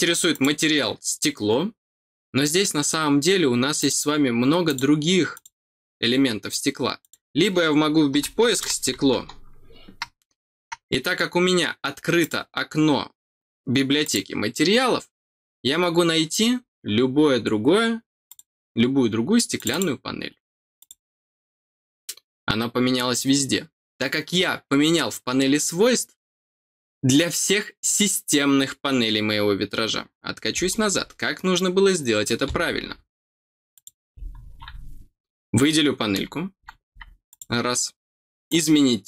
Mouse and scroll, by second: 0.3 click, 2.4 scroll down 1, 3.7 click, 4.6 click, 5.3 click, 7.0 click, 12.1 click, 14.0 click, 16.3-17.0 scroll down 2, 18.2 click, 19.5 click, 20.7 click, 33.7 click, 37.2 click, 38.4 click.